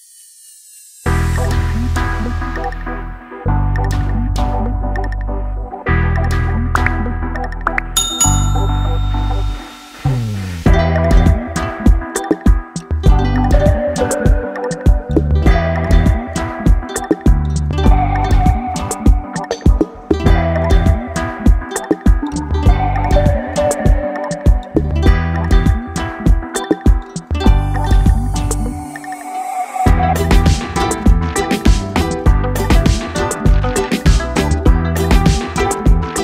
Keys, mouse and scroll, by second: 0.3 click, 5.9 ctrl+d, 7.4 click, 11.8 shift+Right, 13.0 ctrl+t, 13.5 Right, 14.7 shift+Down, 15.9 Up, 16.4 shift+Up, 19.4 Down, 20.7 Right, 22.1-25.2 drag, 25.5 ctrl+j, 26.0 click, 27.2 shift+Right, 28.4 ctrl+z, 28.8 Right, 30.9 Down, 32.4 click.